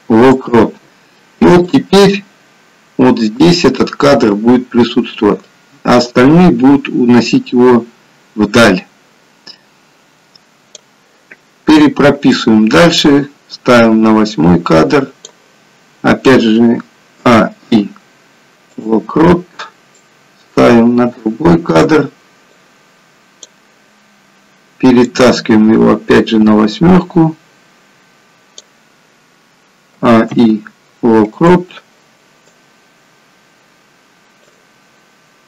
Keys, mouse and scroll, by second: 2.0 click, 12.5 click, 17.4 a, 17.8 i, 20.3 click, 22.7 click, 25.0 click, 30.1 a, 30.5 i, 32.8 click.